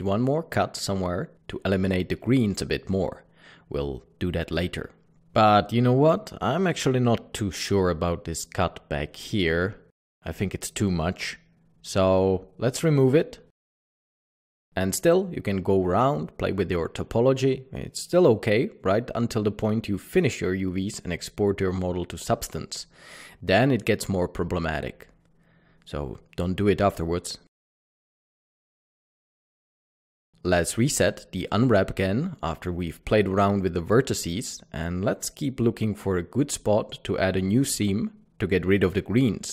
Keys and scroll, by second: 5.1 Tab, 10.3 typing, 12.9 typing, 15.9-17.7 typing, 20.5-22.1 typing, 21.0 Tab, 23.6 Tab, 24.2 Tab, 25.3-25.7 typing, 28.7 typing, 29.3 Tab, 29.7 alt+a, 30.4 Escape.